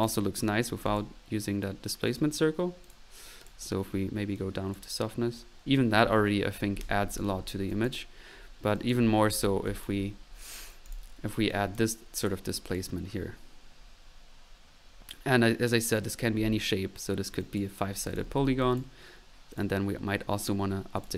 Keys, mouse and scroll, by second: 0.9 click, 1.7 middle click, 2.1 click, 2.9 click, 3.4 click, 3.9 click, 4.3-5.0 drag, 7.7 click, 8.7 click, 9.2 ctrl+z, 10.9 ctrl+click, 11.1 ctrl+drag, 11.4 click, 11.6 click, 11.8-12.5 drag, 12.9-13.3 drag, 16.0 click, 17.4-17.8 drag, 18.1 click, 18.3 middle click, 18.9 drag, 19.5 click, 20.9 click.